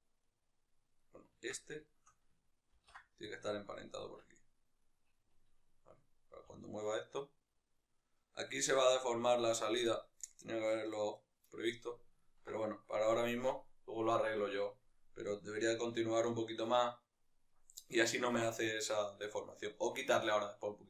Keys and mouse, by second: 0.1 right click, 0.7 right click, 1.3 Tab, 1.6-3.1 shift+right drag, 3.1 ctrl+p, 4.0 Tab, 4.6-6.1 right drag, 6.1 g, 8.1 right click, 11.9-20.8 ctrl+middle drag.